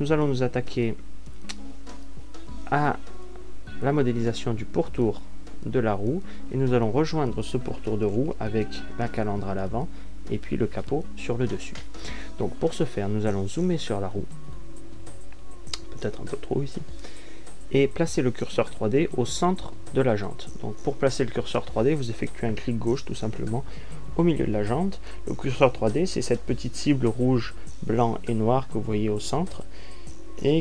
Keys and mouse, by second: 1.3 z, 2.9 a, 3.2 z.